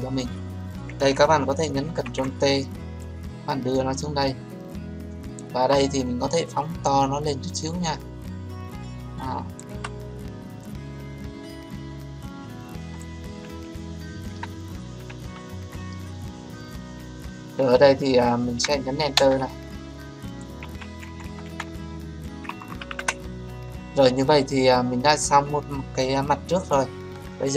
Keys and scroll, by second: 1.7 ctrl+t, 19.1 Return.